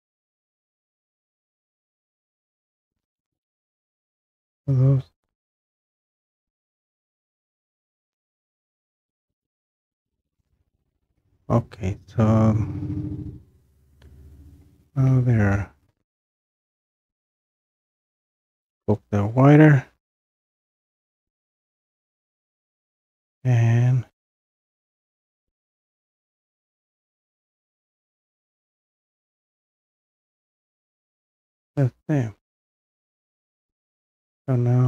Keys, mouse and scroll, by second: 0.5-4.3 middle drag, 0.5 scroll, 1.7 scroll, 2.5-3.3 scroll, 3.6-4.1 scroll, 4.3-5.5 scroll up 5, 6.1-7.3 scroll down 1, 7.4 scroll down 1, 10.5 scroll down 1, 10.6 click, 11.3-11.7 scroll down 1, 12.0 scroll up 1, 12.2-13.2 scroll down 3, 14.0 scroll down 1, 14.7-16.3 scroll down 3, 16.3-17.5 scroll up 3, 17.9-18.5 scroll down 2, 18.1-18.5 scroll up 1, 18.5-20.2 scroll down 3, 20.2-20.5 scroll up 1, 20.5 scroll down 2, 20.6 scroll up 1, 20.7-21.0 scroll down 1, 21.0-27.4 drag, 27.4 middle click, 27.4 scroll, 28.3-31.8 middle drag, 28.3-29.2 scroll, 31.8-33.3 drag.